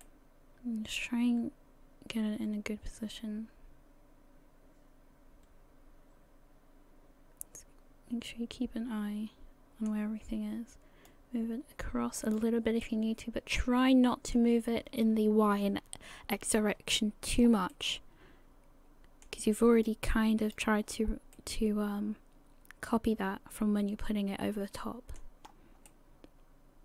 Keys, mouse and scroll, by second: 0.0 middle click, 1.9 middle click, 2.1 shift+middle click, 11.1 click, 12.8 middle click, 16.8 scroll down 2, 17.3-17.7 scroll up 2, 17.7 middle click, 19.8 click, 20.9-21.3 scroll down 3, 21.3 middle click, 25.4 scroll up 2, 25.9 middle click.